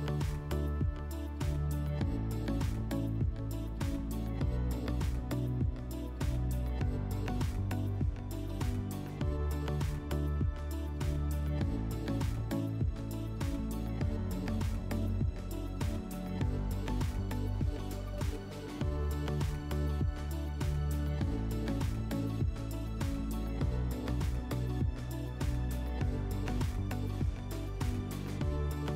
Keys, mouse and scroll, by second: 0.3 click, 2.3 click, 3.3 click, 5.4 click, 9.1 click, 9.6 alt+w, 11.8 right click, 14.6-16.2 drag, 16.9-18.4 drag, 19.0 click, 20.0 click, 22.1 click, 22.7 scroll, 23.4 scroll, 23.5 click, 26.2 click, 26.9-27.5 scroll, 28.5 click.